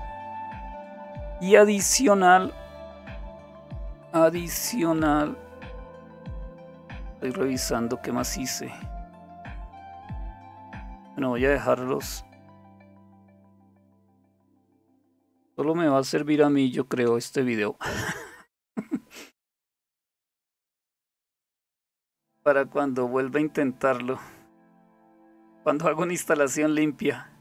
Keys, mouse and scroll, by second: 0.3-1.1 scroll down 1, 1.1-5.3 scroll down 2, 5.3-6.6 scroll down 1, 6.6-7.7 scroll down 1, 7.7-10.6 scroll up 2, 10.6-13.4 scroll up 1, 14.4 ctrl+-, 16.0 ctrl++, 18.8-24.8 scroll up 1, 20.9 typing, 25.2-25.8 scroll up 1, 25.8-26.3 scroll up 1.